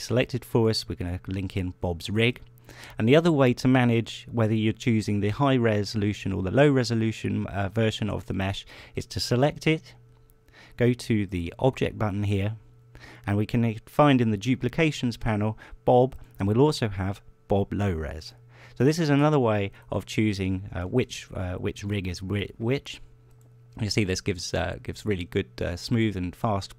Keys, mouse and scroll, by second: 1.1 click, 2.9 shift+click, 8.8 right click, 11.8 click, 16.7 click, 18.8 click, 20.4 right click, 21.5 ctrl+Tab, 22.6 right click, 23.0 r, 23.8 click, 25.0 right click, 25.3 r, 26.4 click.